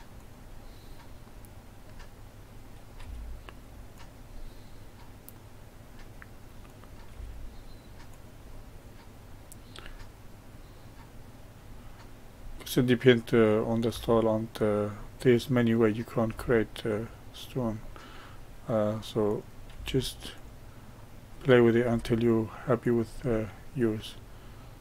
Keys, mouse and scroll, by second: 0.5-2.6 middle drag, 2.6 click, 2.9 g, 4.3-6.6 middle drag, 6.6 click, 7.0 g, 8.4-12.8 middle drag, 13.3 click, 13.8 g, 15.8 click, 16.2 g, 17.7-19.2 middle drag, 19.2 click, 19.6 g, 21.4 click, 21.8 g, 23.3-24.8 middle drag.